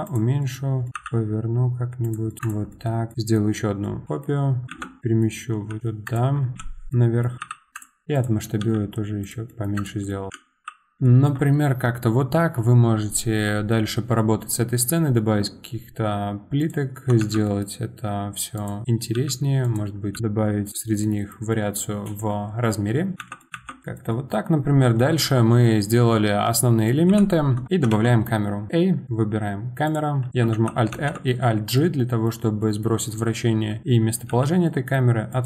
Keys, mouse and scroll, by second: 0.4 middle click, 2.0 r, 2.3 middle click, 2.4 click, 2.7 middle click, 3.1 click, 3.8 middle click, 4.0 g, 4.6 middle click, 4.7 shift+d, 5.0 middle click, 5.7 g, 6.9-7.4 middle drag, 7.7 middle click, 7.7 click, 8.1 click, 8.6 s, 9.5 middle click, 9.7 click, 10.1 middle click, 10.3 g, 11.0-14.1 shift+middle drag, 16.6 click, 17.2 shift+d, 20.7 click, 21.0-23.1 middle drag, 23.1 click, 23.2 shift+d, 23.8-27.1 shift+middle drag, 27.1 KP_7, 27.7 scroll down 3, 27.9 shift+a, 30.5 alt+r, 30.9 alt+g, 31.7-33.7 middle drag, 33.7 KP_7, 34.3 g.